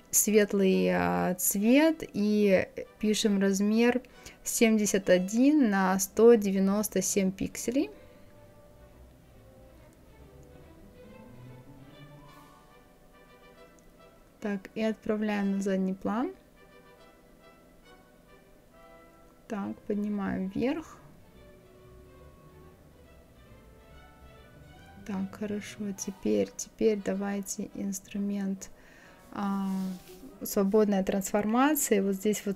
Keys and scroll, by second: 1.8 KP_7, 2.1 KP_1, 5.1 KP_1, 17.3 Up.